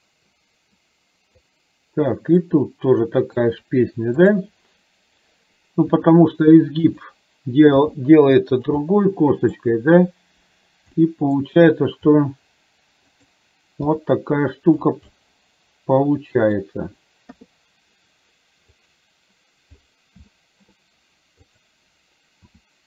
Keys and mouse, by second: 2.5 click, 4.3 click, 5.9 r, 7.9 g, 8.9 middle click, 11.0 middle click, 12.1 r, 13.9 g, 15.2-16.6 middle drag, 18.7 click, 20.4 shift+middle click, 21.7 click, 22.6 r.